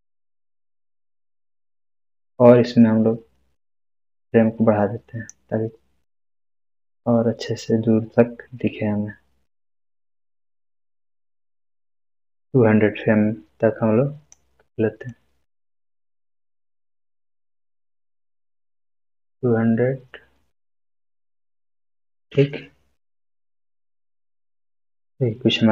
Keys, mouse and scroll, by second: 3.5-3.9 scroll up 1, 3.9-5.4 drag, 11.6-14.4 drag.